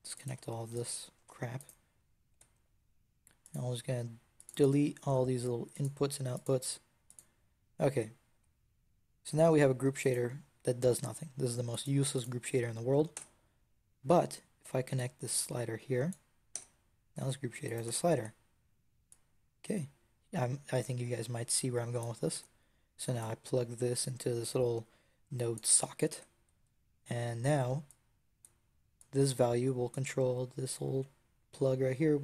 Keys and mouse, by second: 2.2 n, 8.2 n, 9.1 Tab, 9.9-11.6 right drag, 13.0 Tab, 16.4 Tab, 17.1 Tab, 17.7 x, 18.0 Tab, 22.2 Tab, 23.1-25.4 right drag, 26.0 Tab, 27.7 click, 30.6-32.2 drag.